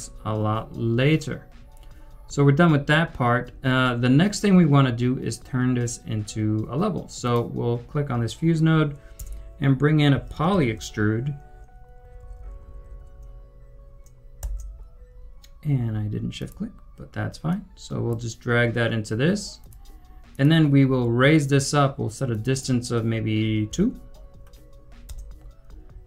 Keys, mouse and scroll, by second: 9.1 double click, 9.2 Tab, 9.8-11.3 typing, 14.5 Return, 23.6 2, 25.0 Return.